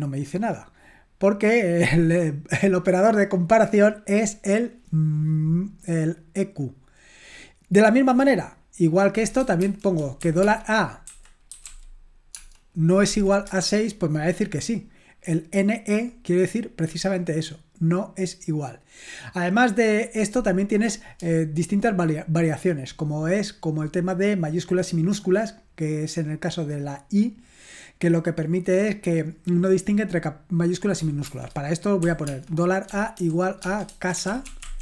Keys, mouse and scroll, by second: 6.4-7.5 scroll down 1, 7.5-8.1 scroll down 1, 8.1-9.4 scroll down 1, 9.4 scroll down 1, 9.6-13.5 typing, 31.3-34.8 typing.